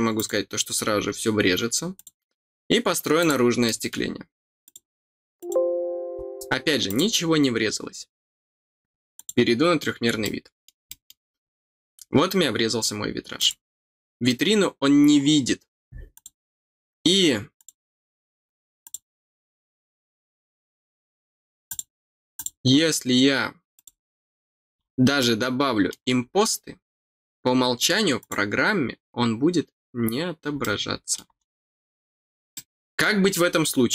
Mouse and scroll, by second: 0.1 click, 1.9 click, 3.1 click, 3.6 middle click, 4.6 click, 5.3 click, 6.8 click, 9.1 click, 10.2 middle click, 10.8 middle click, 11.3-11.6 scroll up 2, 13.3 click, 16.1 click, 17.5 click, 18.8 click, 21.6 click, 22.3 click, 23.7 click, 25.1 middle click, 28.1 click, 30.5 middle click, 32.5 middle click.